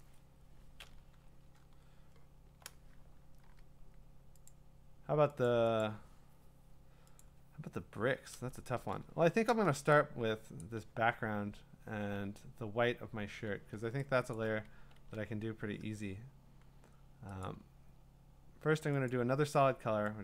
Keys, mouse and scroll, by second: 2.6-3.4 scroll, 3.4 w, 4.5 click, 5.8 click, 7.3 click, 9.0-9.7 scroll, 10.2 middle click, 10.2-12.0 scroll, 10.6 click, 14.3 click, 15.0 ctrl+z, 17.4 click, 19.1 click.